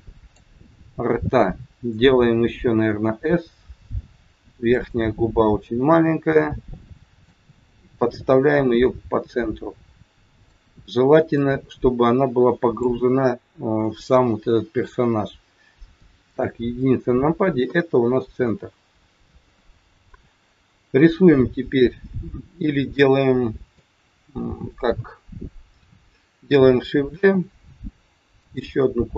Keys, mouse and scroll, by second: 0.7 scroll up 6, 3.0 s, 5.6 click, 8.0 click, 11.3 click, 16.2 KP_1, 18.1 scroll up 3, 18.5 shift+middle click, 22.6 middle click, 27.2 shift+d, 28.7 middle click.